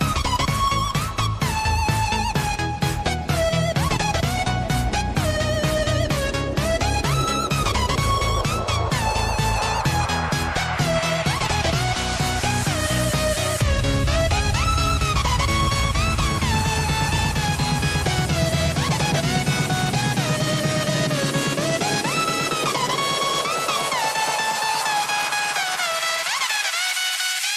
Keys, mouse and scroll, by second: 2.2 shift+click, 4.4 scroll up 1, 5.5-8.0 drag, 8.9 shift+click, 9.4 shift+drag, 9.9 shift+click, 10.5 shift+click, 11.5 click, 13.6 click, 14.0-15.4 scroll down 1, 15.4-16.2 drag, 16.2 scroll down 1, 17.1 click, 20.4 click, 21.0 click, 21.8 KP_1, 23.4 shift+a, 27.0 click.